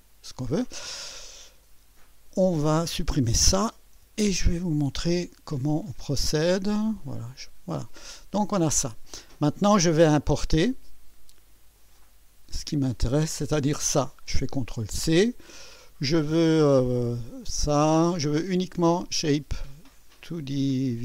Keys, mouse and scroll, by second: 2.9 click, 4.0 Delete, 7.0 click, 8.4 click, 11.8 click, 13.1 click, 14.8 ctrl+c, 17.1 click, 19.0 click.